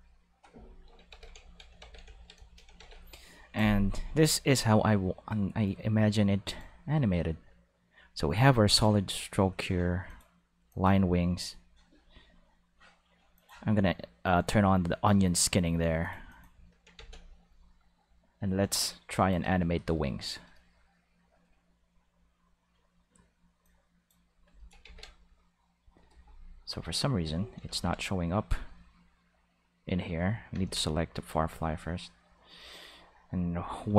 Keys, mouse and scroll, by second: 1.1 ctrl+s, 1.8 ctrl+s, 2.8 ctrl+s, 5.6 click, 8.7 click, 10.0 click, 10.7 click, 11.4-13.4 drag, 16.0 click, 16.3 click, 16.9 ctrl+s, 18.7 click, 19.4 shift+Tab, 23.6 click, 24.8 ctrl+s, 26.7 click, 27.1 click, 27.7 ctrl+Tab, 28.3 click, 28.9 right click, 30.5 ctrl+Tab, 31.1 click, 32.2 click, 33.2 click, 33.6 click.